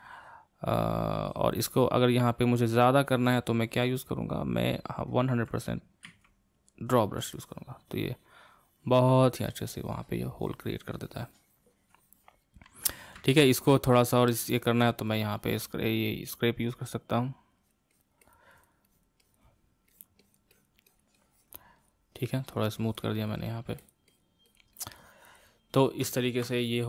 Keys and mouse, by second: 6.0 x, 7.4-10.4 ctrl+drag, 13.2-15.1 middle drag, 15.1-26.2 drag, 26.2-26.8 ctrl+middle drag.